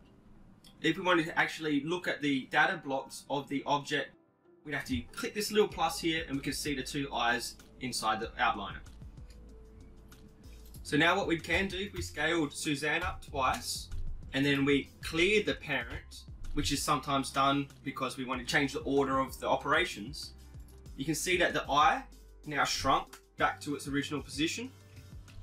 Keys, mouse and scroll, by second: 1.1-2.7 drag, 7.8-9.5 drag, 10.0 click, 11.3-12.4 right drag, 12.2 s, 14.7-16.5 right drag, 16.2 alt+p.